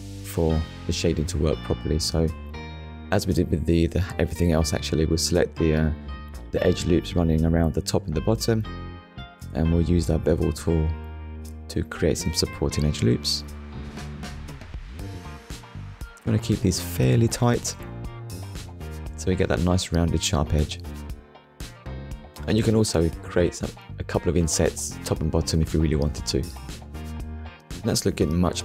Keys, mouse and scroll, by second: 0.8 middle click, 2.2 Tab, 4.1 click, 4.6 click, 5.5 alt+click, 6.5 middle click, 7.7 alt+shift+click, 8.5 middle click, 9.6 shift+middle click, 11.2 click, 12.1 middle click, 13.3 click, 20.4 click, 21.0 click, 21.4 middle click, 22.1 Tab, 22.6 scroll down 1, 23.0 middle click, 24.2 click, 25.6 click, 27.1 click, 27.9 click, 28.2 middle click.